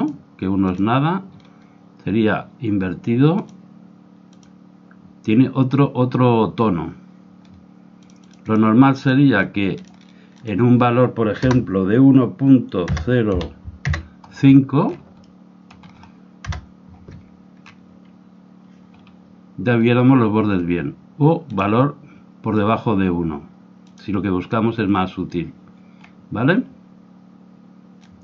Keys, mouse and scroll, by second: 3.3-6.3 drag, 7.9-11.7 drag, 15.2-17.6 middle drag, 19.6-21.4 scroll up 1, 21.4-23.4 drag, 23.8-25.7 drag, 26.1-28.1 middle drag, 28.1 click.